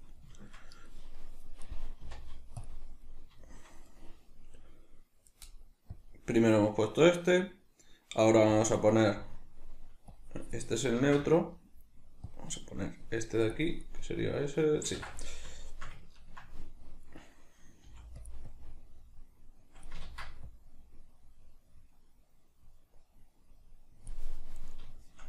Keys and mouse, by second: 2.0 z, 5.9-15.2 drag, 11.0 ctrl+z, 14.9 ctrl+z, 15.2-18.3 middle drag, 17.8 f, 18.3 click, 20.1 ctrl+z, 20.1-24.6 drag, 24.6-25.2 middle drag.